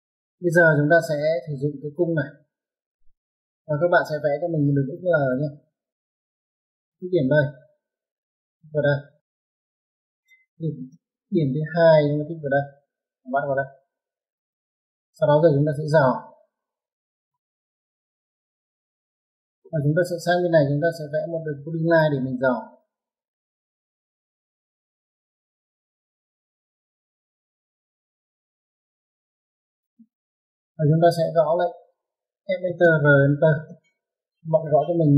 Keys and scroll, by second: 1.2-2.3 typing, 6.4-7.0 typing, 10.6 space, 14.3 ctrl+1, 26.3 space, 29.0-30.1 typing, 31.8-33.7 typing.